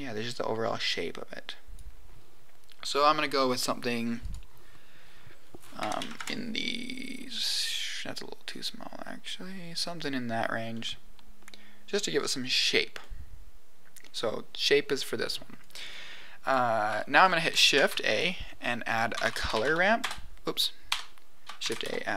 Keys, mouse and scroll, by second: 4.2-6.7 drag, 8.6-10.0 drag, 10.7-12.4 middle drag, 12.5 scroll up 2, 12.9-13.9 middle drag, 15.6 click, 16.4 click, 17.7 shift+a, 21.5 shift+a.